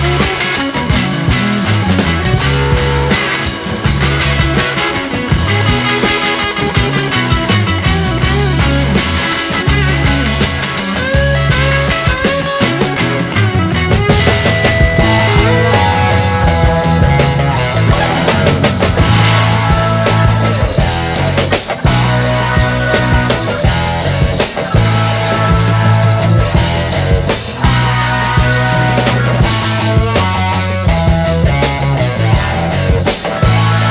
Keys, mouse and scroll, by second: 0.9 click, 2.0 click, 3.1 click, 4.0-5.4 scroll down 7, 5.4-7.4 drag, 7.4 click, 11.7 scroll down 2, 12.1 click, 13.6 scroll up 3, 15.6 click, 17.1-18.4 drag, 18.4-19.4 scroll down 1, 19.4 click, 20.8 click, 22.0 click, 23.1 shift+Right, 24.6-26.2 drag, 26.3 click, 27.1 Left, 27.8-29.2 drag, 29.7 click, 31.0 click, 32.5 shift+Left.